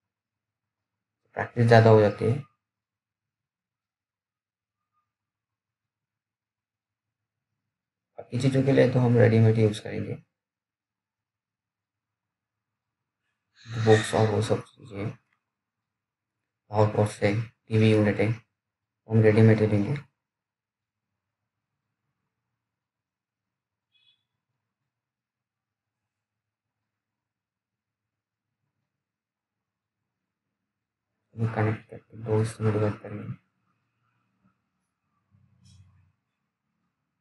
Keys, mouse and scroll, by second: 5.7 click, 5.7 click, 6.8-7.6 scroll up 1, 7.6 click, 17.6 alt+middle click, 18.3-18.7 alt+scroll down 2, 19.5 alt+middle click, 20.3-22.6 scroll up 1, 24.5 2, 25.1 click, 26.6-28.0 scroll down 1, 28.0 scroll up 1, 29.4-30.0 scroll down 1, 30.0-31.3 scroll up 1, 31.3 click.